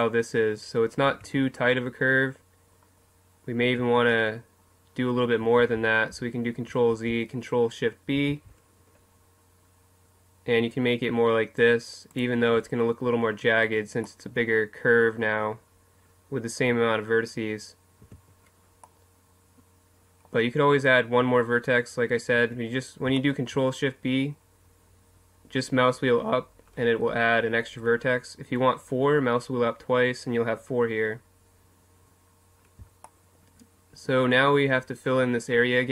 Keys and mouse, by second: 1.1 Tab, 3.8 Tab, 5.6 ctrl+z, 5.7 ctrl+z, 6.1 ctrl+z, 12.2 click, 12.3 Tab, 18.0 a, 20.7-22.4 middle drag, 22.4 Tab, 33.4-34.4 middle drag.